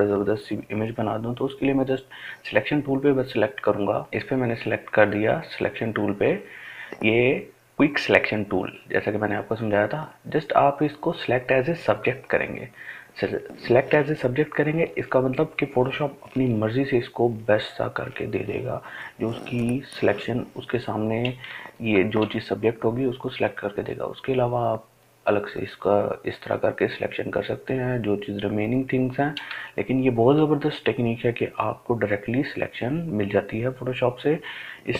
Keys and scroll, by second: 17.4 ctrl+space.